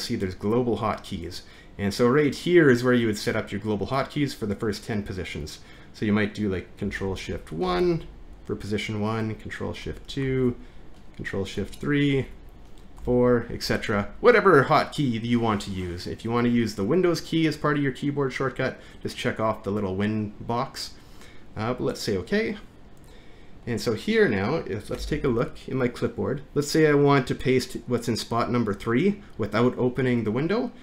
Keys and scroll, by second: 9.8 ctrl+1, 25.0 alt+`.